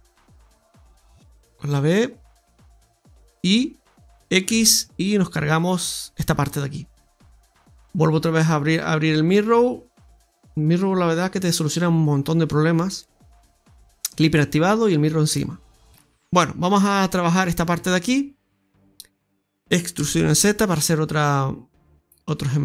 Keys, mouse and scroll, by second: 0.2 click, 0.7 click, 4.4 x, 7.5 click, 12.8 click, 14.7 click, 16.0 shift+middle click, 16.0-16.6 scroll down 2, 17.8 Tab, 18.3 middle click, 19.0 middle click, 19.4 shift+middle click, 19.6 click, 19.6 alt+shift+right click, 19.6 e.